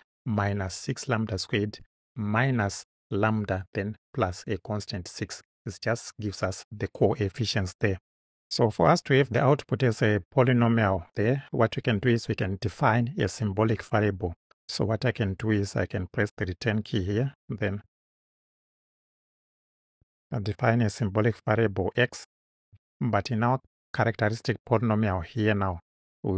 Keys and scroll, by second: 16.2 Return, 17.5 s, 17.9 y, 18.8 m, 20.0 s, 20.3 space, 21.7 x.